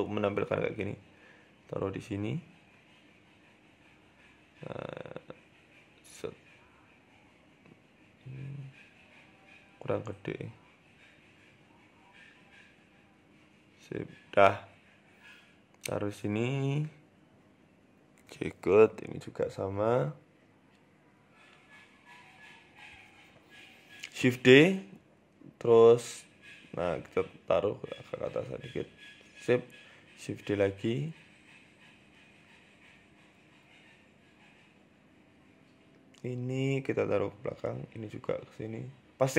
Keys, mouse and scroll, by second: 0.6 s, 2.3-2.6 scroll down 2, 2.9 s, 4.5 right click, 5.5 s, 7.1 right click, 7.3 s, 8.6 s, 9.8 g, 11.2 s, 11.9 s, 15.5 right click, 16.9 right click, 18.0 shift+d, 18.7 e, 19.8 r, 22.6 right click, 22.6 g, 23.2 shift+d, 24.4 s, 28.0 g, 29.7 shift+d, 31.0 s, 34.3 right click, 35.0 s, 36.1-36.6 scroll up 3, 36.6 right click, 37.8 right click, 39.2 shift+middle click.